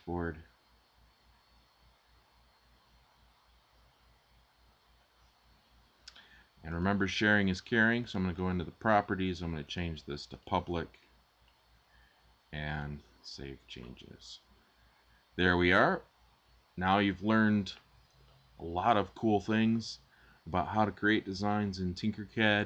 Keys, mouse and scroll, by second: 10.8 scroll down 1.